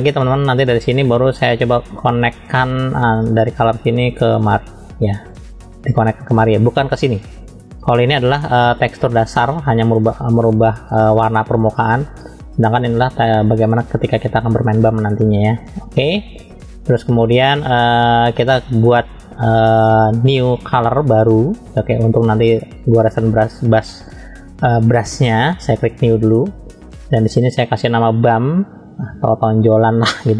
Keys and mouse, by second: 1.0-2.6 middle drag, 4.4-16.2 drag, 17.4 click, 26.0-30.3 drag.